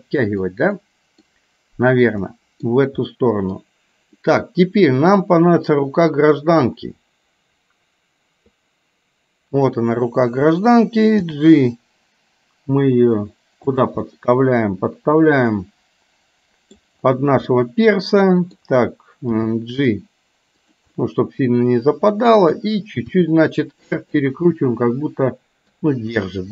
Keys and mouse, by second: 0.9 middle click, 2.4 middle click, 3.2 middle click, 4.2 middle click, 6.7-8.6 drag, 9.6 click, 11.2 g, 14.1-16.9 middle drag, 17.6-18.6 middle drag, 19.4 g, 21.0-22.4 middle drag, 23.2 r, 24.5-25.7 middle drag.